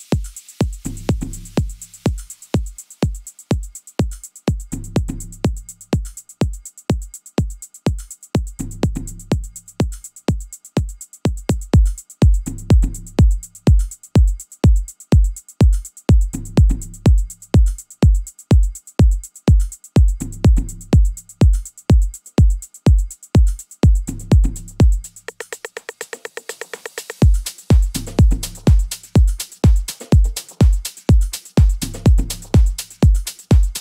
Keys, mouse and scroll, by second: 24.3 Escape, 24.9 right click, 25.5-33.8 right drag.